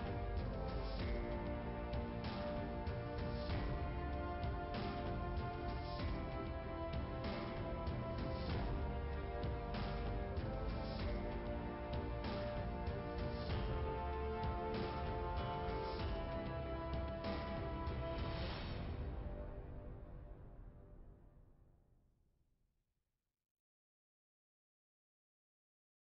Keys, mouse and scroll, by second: 0.4 click, 2.0 click, 3.4 click, 4.6-5.0 scroll up 2, 7.1 click, 9.0 scroll up 2, 11.0-12.1 scroll down 1, 17.1 click, 21.2 click, 22.7 click, 24.0 click.